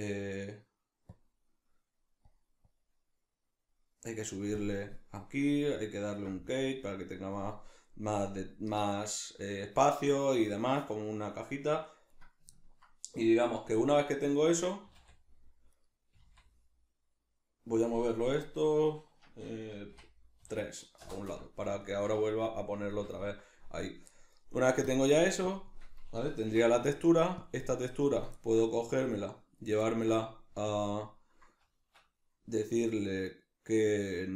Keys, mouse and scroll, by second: 1.1 click, 1.5 middle click, 2.2 click, 2.7-11.6 drag, 11.6-12.1 middle drag, 12.1 right click, 14.3-15.8 middle drag, 14.8 g, 15.8 right click, 16.2 g, 21.8-24.9 shift+middle drag, 24.9 click, 25.4-26.8 drag, 26.5 n, 26.8-27.4 middle drag, 27.4 click, 27.7 click, 28.4-30.7 ctrl+middle drag, 30.7-34.3 drag, 32.0 Escape.